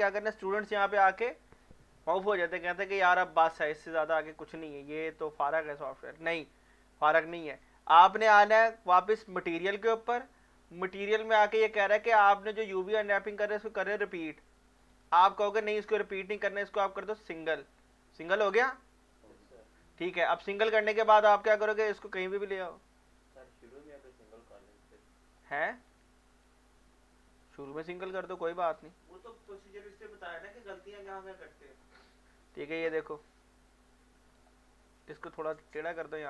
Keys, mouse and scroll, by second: 8.5 click, 14.8 click, 15.0 click, 17.2 click, 21.8-25.9 drag, 25.9 alt+scroll down 1, 26.0 middle click, 26.0-27.6 alt+middle drag, 27.6 scroll up 1, 28.2 scroll down 1, 28.6-30.0 drag, 30.0 click, 30.8-35.2 drag, 35.2-36.2 drag.